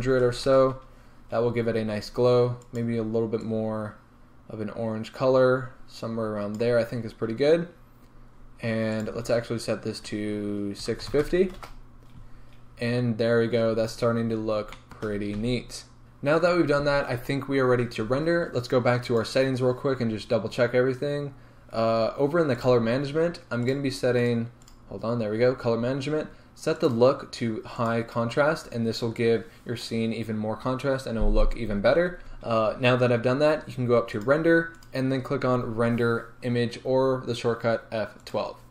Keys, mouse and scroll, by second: 0.5 KP_0, 0.7 Return, 1.4 scroll up 1, 7.1 scroll down 1, 8.1 scroll up 1, 11.6-14.7 drag, 11.8 Return, 13.0-13.5 scroll down 2, 13.5-14.2 scroll up 2, 14.2 scroll down 2, 14.7-28.0 shift+middle drag, 15.2 scroll up 2, 15.5 a, 16.0-21.1 scroll down 2, 21.1-26.4 scroll down 1, 26.4-28.0 scroll down 1, 28.0-38.7 drag, 32.2 Return.